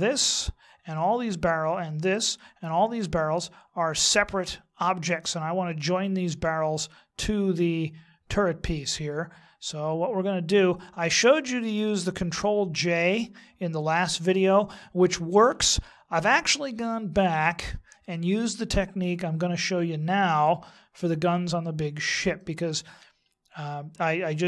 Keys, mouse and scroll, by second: 2.1 right click, 5.1 middle click, 8.7 middle click, 22.3 middle click.